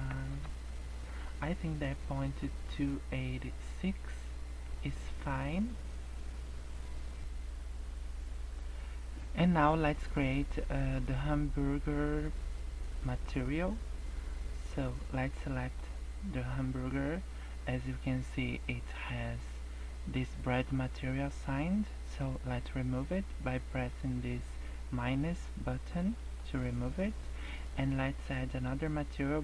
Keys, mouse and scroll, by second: 0.2 KP_0, 4.6 scroll down 5, 5.9 scroll up 2.